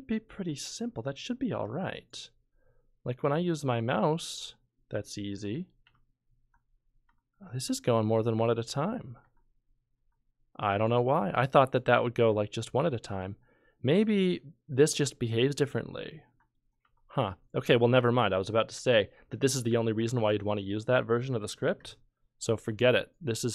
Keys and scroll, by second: 5.8 F11, 6.4 F12, 7.1 F11, 7.7 F11, 8.4 F12, 9.2 F12, 9.9 F12, 16.8 F11, 17.2 F11, 19.3 F11, 19.7 F12, 20.0 F11, 20.3 F12.